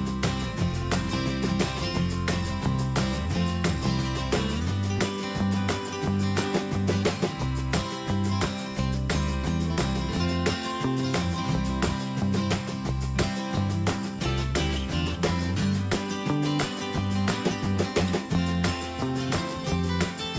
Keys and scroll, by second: 6.1 ctrl+space, 11.1 ctrl+shift+], 13.4 Escape.